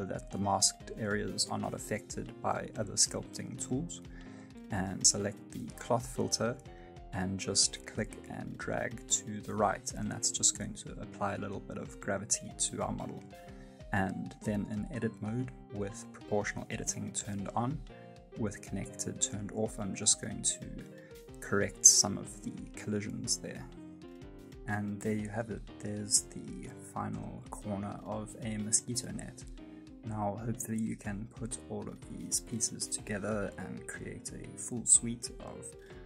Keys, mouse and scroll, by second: 1.1 middle click, 1.4 shift+middle click, 1.7 f, 2.1 click, 2.4 middle click, 2.7 click, 3.1 middle click, 3.7 click, 4.6 scroll down 1, 4.9 middle click, 5.3 click, 5.7 middle click, 6.3 click, 8.9-9.2 scroll down 2, 9.1 middle click, 9.7 click, 10.6 middle click, 11.4 click, 12.3 middle click, 13.9 click, 15.4 right click, 15.7 middle click, 16.4 middle click, 17.9 g, 20.4 middle click, 20.4-20.9 scroll up 1, 21.3 g, 22.0 middle click, 22.7-23.1 scroll down 2, 22.9 middle click, 23.6 Tab, 23.9 middle click, 24.8 shift+middle click, 25.1 middle click, 26.0 g, 26.8 middle click, 27.8 g, 28.0 middle click, 28.3 middle click, 28.4 g, 28.7 g, 29.0 g, 29.2 middle click, 29.3 shift+middle click, 29.5 middle click, 29.7 shift+right click, 29.7 middle click, 29.8 shift+middle click, 29.9 middle click, 30.0 shift+middle click, 30.2 Tab, 30.3 right click, 30.3 shift+s, 30.7 right click, 30.7 shift+right click, 30.9 click, 31.6 ctrl+m, 32.1 shift+d, 32.4 ctrl+m, 32.9 g, 33.3 middle click, 33.5 g, 33.7 middle click, 33.8 middle click, 33.9 shift+middle click, 34.0 shift+middle click, 34.1 shift+middle click, 34.2 scroll down 2, 34.3 shift+middle click, 34.4 right click, 34.5 middle click, 34.6-36.0 typing, 34.9 click.